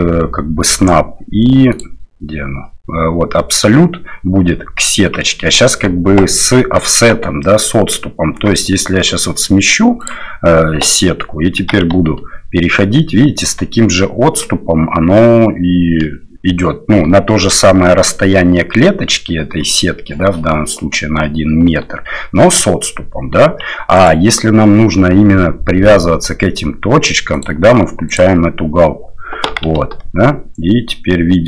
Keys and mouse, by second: 1.7-5.2 drag, 8.3 g, 11.6 g, 27.4-28.4 drag, 29.5 g.